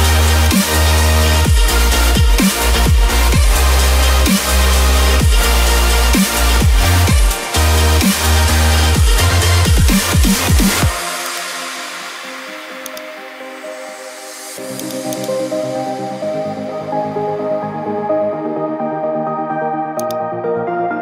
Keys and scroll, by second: 5.0 [.